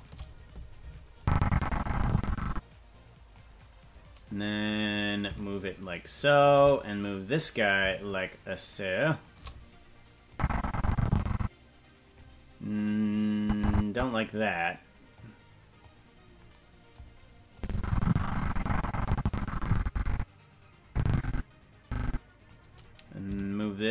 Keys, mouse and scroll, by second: 1.2-3.3 drag, 3.7-4.5 scroll down 2, 5.3-6.5 shift+drag, 7.0-8.0 right drag, 8.0-9.3 shift+drag, 10.3-12.2 drag, 12.8 right click, 13.4 click, 15.1 click, 17.5-22.5 drag, 23.7-23.9 shift+drag.